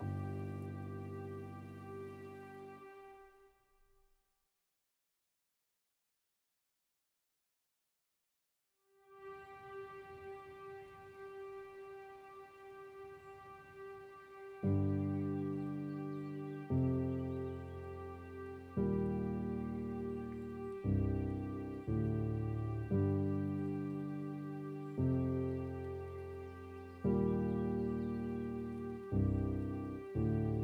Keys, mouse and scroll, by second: 0.8 scroll up 1, 0.9-2.5 middle drag, 2.5-3.0 scroll up 2, 3.4-9.1 drag, 9.1 scroll up 1, 9.1-10.5 middle drag, 10.5 scroll down 2, 10.8-12.9 middle drag, 12.9-18.6 drag, 18.6-19.2 scroll down 6, 19.2 middle click, 19.6 scroll up 2, 24.7-25.9 drag, 26.3 scroll up 5, 26.3 middle click, 26.9 scroll up 2, 27.2-28.3 scroll down 3, 28.3-29.3 drag, 29.3 middle click, 30.2 scroll up 2, 30.5 middle click.